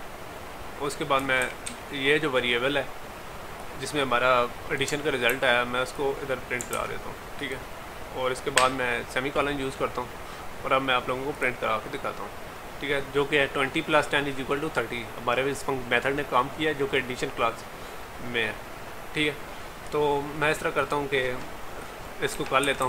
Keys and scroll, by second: 5.4 ctrl+c, 6.8 ctrl+v.